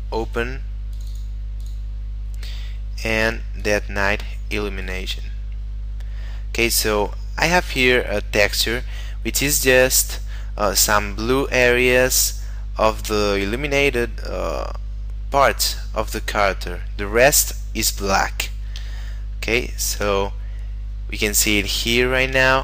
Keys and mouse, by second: 6.1 middle click, 19.2 shift+middle click, 20.9 middle click, 22.1 shift+middle click, 22.5 middle click.